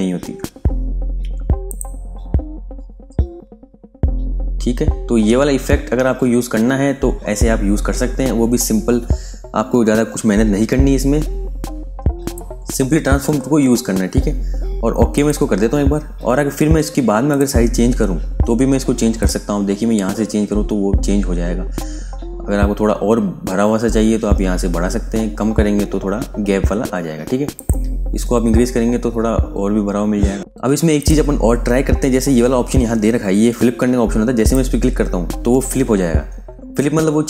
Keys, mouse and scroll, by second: 1.6 click, 1.9 scroll down 1, 2.6-4.5 scroll up 1, 4.9 scroll down 1, 15.0 click, 19.4-19.9 scroll up 1, 20.9 scroll down 1, 22.8-26.8 scroll up 1, 27.4 click, 27.8 scroll up 1, 29.2-30.4 scroll down 1, 30.4 click, 34.3 click.